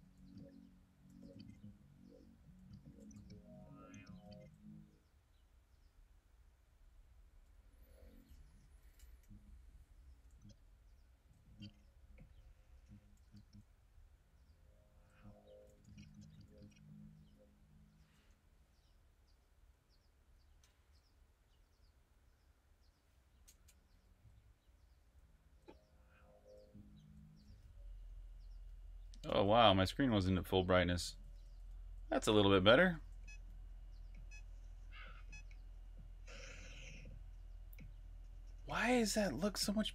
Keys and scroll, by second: 0.0-4.7 typing, 7.2-10.7 typing, 11.8 typing, 13.2 typing, 14.5-16.8 typing, 20.0 Up, 20.4 Return, 23.7 g, 24.9-26.9 typing, 29.6-34.1 typing, 39.3-39.9 typing.